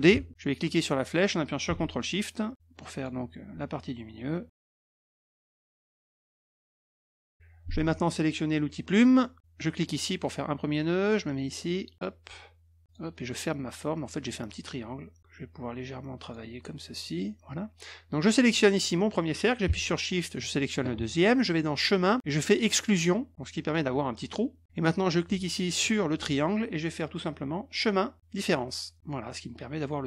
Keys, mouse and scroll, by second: 0.1 ctrl+d, 0.7-3.0 drag, 5.3-7.3 drag, 8.9 click, 9.8 click, 11.9 click, 12.8 click, 14.1 click, 15.2-16.3 drag, 18.4 click, 20.4 shift+click, 21.7 click, 22.7 click, 23.6 click, 25.6 shift+click, 26.9 click, 29.2 click.